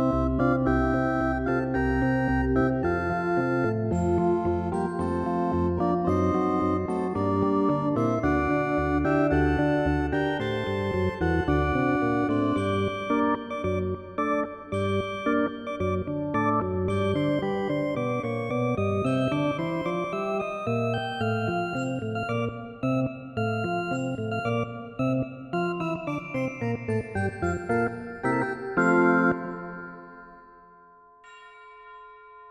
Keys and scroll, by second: 23.1 ctrl+z.